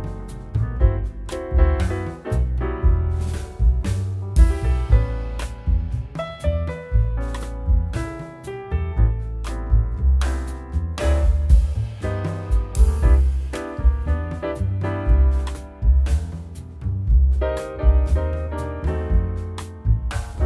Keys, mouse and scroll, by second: 2.8 middle click, 3.6 z, 4.1-4.4 scroll up 1, 5.3 alt+middle click, 11.3 middle click, 13.8 scroll down 1, 14.3 ctrl+click.